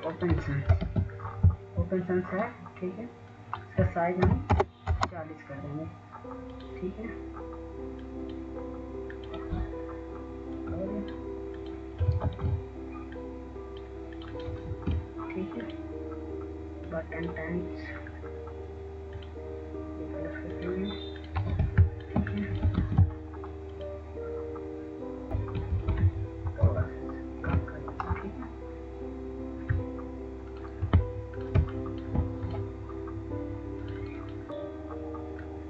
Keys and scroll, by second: 3.7 ctrl+a, 7.1-7.4 typing, 7.8 Return, 11.1 typing, 15.2 ctrl+alt+c, 17.7 ctrl+a, 27.9 ctrl+a, 29.2 ctrl+shift+,, 34.5 Right, 34.5 w.